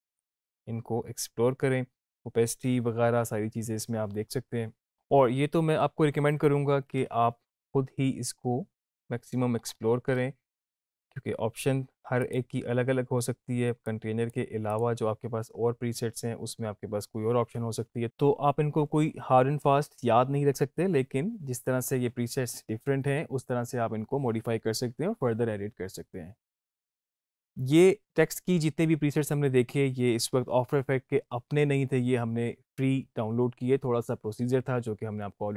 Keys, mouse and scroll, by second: 9.5 scroll up 1, 12.5 click.